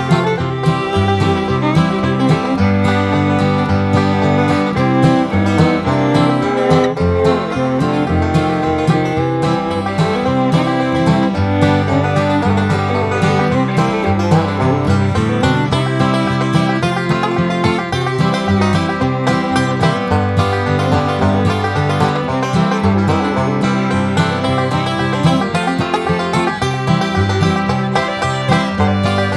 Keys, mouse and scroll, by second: 1.7 click, 2.3 Escape, 2.7 click, 5.3 click, 7.4 click, 8.4 click, 10.4 click, 11.0 Escape, 11.4 click, 13.0 click, 15.4 click, 17.2 click, 18.8 click, 19.1 Escape, 19.5 click, 21.0 click, 24.7 click, 27.2 click, 29.0 click.